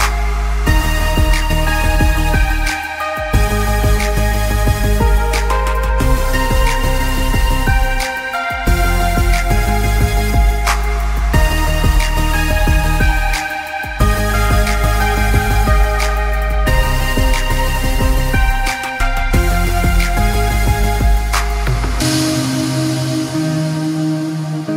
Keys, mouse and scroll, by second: 0.2 click, 0.3 scroll up 1, 0.7 scroll down 1, 0.8 scroll up 1, 1.0 click, 1.3 space, 1.6-1.9 alt+scroll up 3, 1.7 click, 2.1 click, 3.0 scroll down 1, 3.1 space, 3.3 click, 3.5 alt+scroll up 1, 3.8 click, 5.8 click, 6.1 click, 8.1 scroll down 1, 8.3 click, 8.8-9.9 scroll down 5, 8.9 click, 9.5 click, 9.9 click, 10.0 space, 10.2 alt+scroll up 1, 10.4 click, 10.5 ctrl+z, 10.7 click, 11.8 space, 11.9 click, 14.9 click, 15.1 click, 15.2 scroll up 1, 15.3 click, 15.7-16.0 alt+scroll down 2, 16.0 click, 16.5 click, 16.8 scroll up 1, 17.2 scroll down 1, 17.6 click, 17.8-18.3 scroll down 2, 17.9 click, 18.4 click, 20.0 scroll up 1, 20.2 click, 20.9 click, 21.6 click, 22.4-23.1 scroll up 2, 22.5 click, 23.1 click, 23.7 shift+click, 24.1 shift+click.